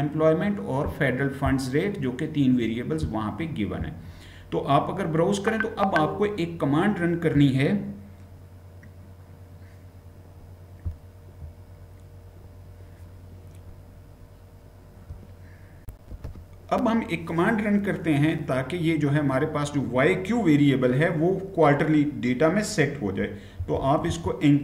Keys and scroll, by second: 15.7 shift+F9, 23.1-24.6 typing.